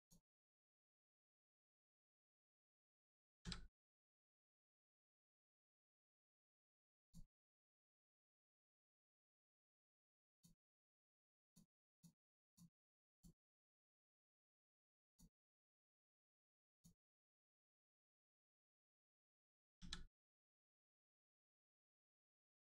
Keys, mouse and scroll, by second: 0.3-1.1 scroll down 1, 1.5 middle click, 2.4 click, 3.4 a, 6.9 click, 10.2 click, 12.4 click, 15.0 click, 17.2 click, 18.3 middle click, 19.8 a, 20.5 right click.